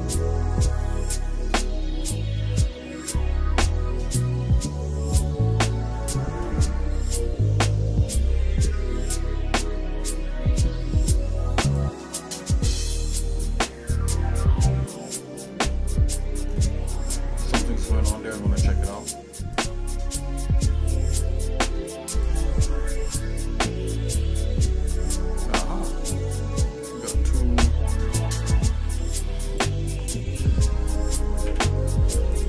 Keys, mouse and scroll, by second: 0.0 middle click, 0.9 shift+middle click, 4.2 scroll down 1, 4.7 scroll up 1, 6.0 shift+middle click, 6.6 middle click, 9.6 scroll up 1, 11.7 click, 12.3 Tab, 13.3-15.7 shift+middle drag, 15.9 Tab, 16.7 shift+middle click, 20.4 click, 21.1 shift+middle click, 22.1 click, 24.1 g, 26.7 shift+middle click, 28.8 z, 31.5 Delete, 32.3 click.